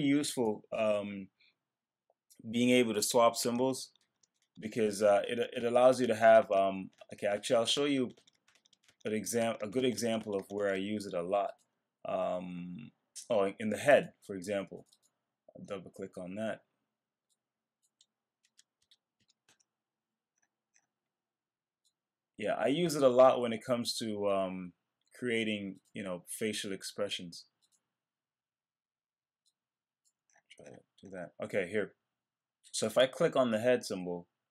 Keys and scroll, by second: 3.5 super+z, 19.4 Return.